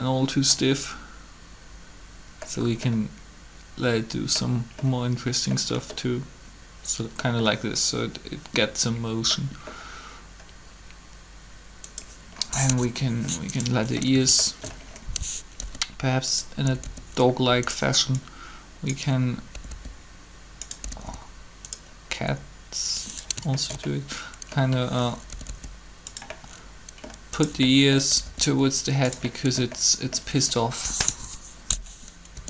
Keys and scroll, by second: 12.4 3, 15.6 typing, 18.0 typing, 19.5 typing, 20.8 typing, 22.1 typing, 25.4 typing, 28.1 typing, 30.8 3, 32.3 r.